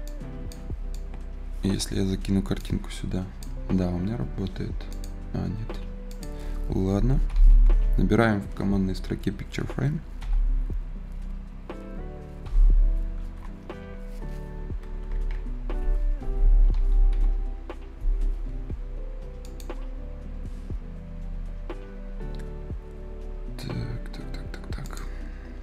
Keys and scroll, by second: 7.1 p, 10.0 i, 12.3 k, 13.2 BackSpace, 14.9 BackSpace, 15.4 Escape, 16.5 p, 17.0 i.